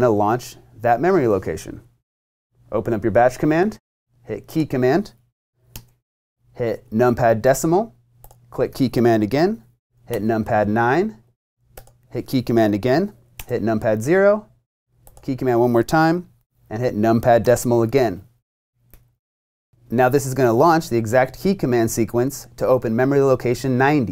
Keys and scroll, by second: 10.1 9, 13.3 0.